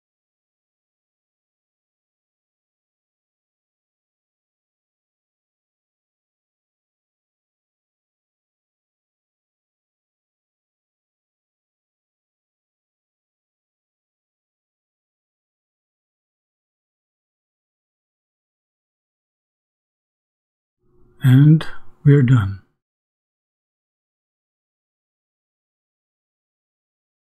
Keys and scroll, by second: 0.0-1.1 typing, 1.8 shift+Return, 13.2-15.1 typing, 16.1 shift+Return.